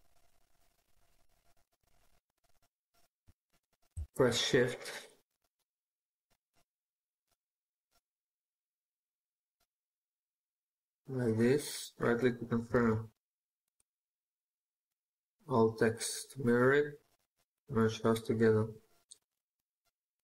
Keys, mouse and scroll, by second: 0.5-1.2 scroll up 1, 10.7 right click, 12.6 alt+x, 19.4 right click.